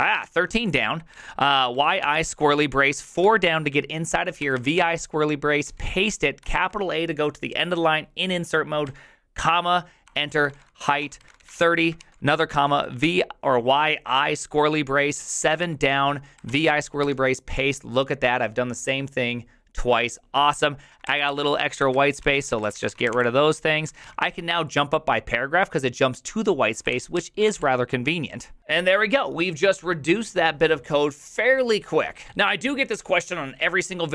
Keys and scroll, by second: 0.0-3.2 typing, 4.4-6.4 typing, 8.8 typing, 10.0-13.5 typing, 15.2-17.2 typing, 20.8-24.0 typing, 26.6-29.1 typing.